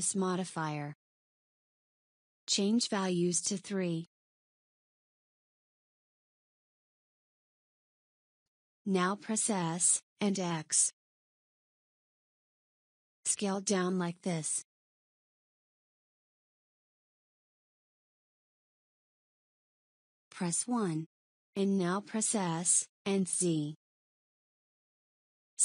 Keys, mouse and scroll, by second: 1.7 click, 2.6-3.8 drag, 5.3 scroll up 3, 6.0-7.2 scroll up 2, 7.2-9.4 shift+middle drag, 9.4 s, 19.7 KP_1, 21.7 s.